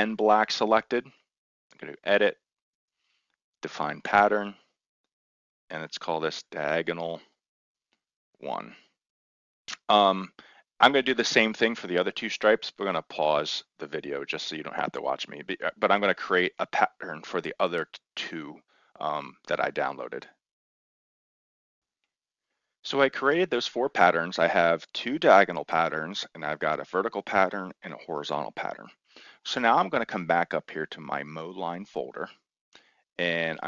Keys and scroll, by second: 5.5-9.1 typing, 8.7 Return.